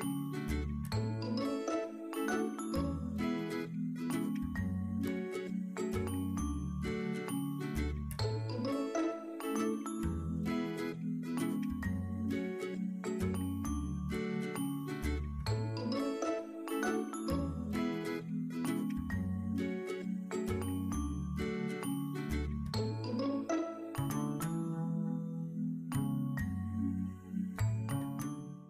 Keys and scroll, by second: 0.8 ctrl+`.